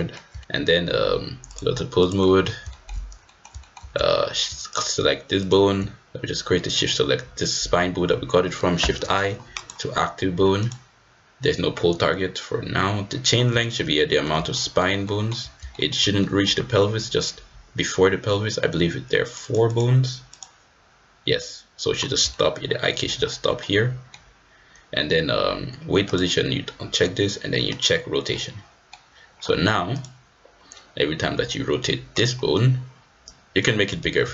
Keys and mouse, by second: 0.4 shift+click, 1.6-2.2 drag, 2.2 middle click, 2.6 shift+middle drag, 3.2 middle drag, 3.6 shift+click, 4.7-5.1 drag, 5.4-5.8 drag, 6.7 shift+click, 8.7 shift+i, 10.6 click, 13.5 shift+middle drag, 13.9 middle drag, 14.5 shift+middle drag, 14.6 shift+click, 14.7 shift+middle drag, 15.0 shift+drag, 15.7 shift+middle click, 16.2 middle click, 19.2 click, 19.7 click, 22.3 shift+middle drag, 22.4 shift+click, 22.6 shift+middle click, 22.6 shift+click, 23.2 middle drag, 23.7 middle drag, 23.9 click, 24.0 middle click, 27.7 click, 28.2-28.9 middle drag, 31.0-31.4 middle drag, 31.4 click, 33.2 click, 34.2 ctrl+z.